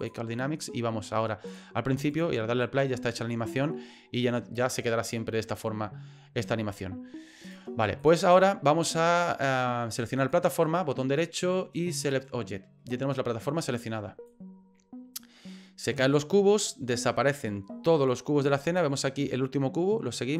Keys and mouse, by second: 1.5 click, 7.4 click, 8.1-10.3 drag, 10.6-12.1 right drag, 14.3-18.8 drag.